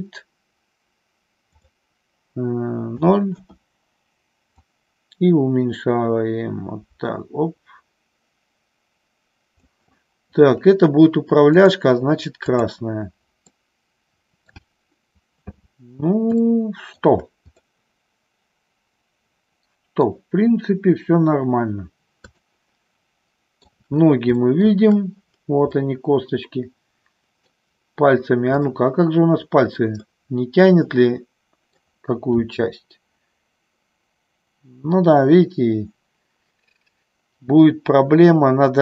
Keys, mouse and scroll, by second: 1.5-3.8 drag, 4.6-9.5 drag, 13.6-14.7 middle drag, 16.4 shift+middle click, 17.7-20.2 middle drag, 22.5-23.8 shift+middle drag, 24.4 shift+middle click, 25.8-27.5 middle drag, 28.5-29.6 drag, 30.2-31.8 middle drag, 32.4 r.